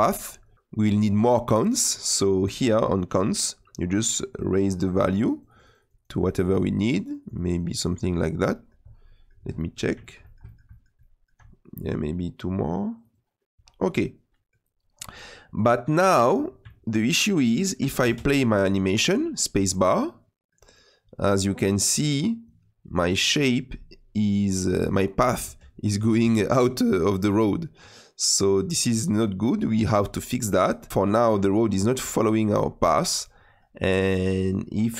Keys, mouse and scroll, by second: 4.3-8.1 drag, 8.1 scroll down 1, 8.5 middle click, 8.8 scroll down 3, 9.0-11.4 middle drag, 11.4-12.9 scroll down 3, 12.9 click, 13.5 scroll down 2, 14.0 middle click, 14.9-15.5 scroll up 7, 15.8-16.6 scroll down 3, 16.6-18.0 shift+middle drag, 18.0 space, 20.0-23.8 middle drag, 25.4 space, 26.2-29.2 middle drag, 29.2-30.7 drag, 30.9-34.9 shift+middle drag.